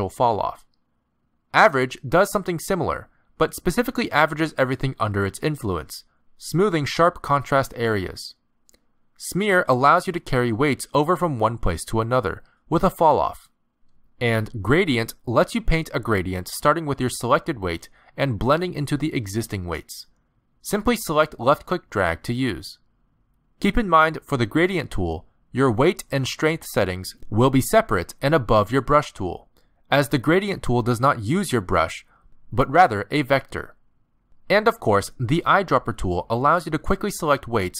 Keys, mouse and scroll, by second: 0.5 click, 2.5 click, 3.6 click, 4.5 click, 6.1 middle click, 6.5 ctrl+z, 6.7 ctrl+z, 7.3 ctrl+z, 7.5 middle click, 8.2 click, 11.2 click, 13.0 middle click, 14.9 click, 20.3 click, 22.7 click, 24.6 ctrl+z, 24.8 ctrl+z, 25.2 ctrl+z, 26.2 click, 28.6 click, 29.9 click, 30.7 click, 32.1 click, 34.5 click, 36.8 click.